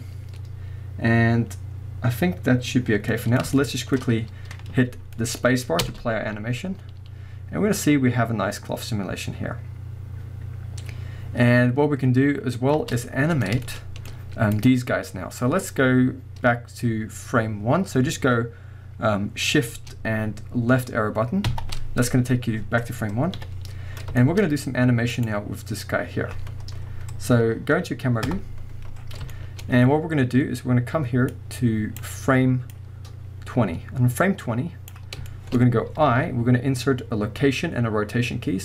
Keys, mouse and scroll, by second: 0.0-3.1 scroll down 1, 3.1-6.3 middle drag, 4.0-4.9 scroll up 1, 4.9-5.2 scroll down 1, 5.8 space, 12.8 space, 13.2-14.5 middle drag, 14.5 click, 15.3 scroll down 1, 21.5 shift+Left, 23.4 KP_1, 24.2-25.1 shift+middle drag, 24.4 scroll up 1, 25.1 click, 25.6-28.3 middle drag, 25.6 scroll up 2, 28.3 KP_0, 28.5-29.0 drag, 29.0-29.3 scroll down 1, 29.3-31.3 shift+middle drag, 29.7 scroll up 1, 31.3-35.3 drag, 35.3-38.6 shift+middle drag.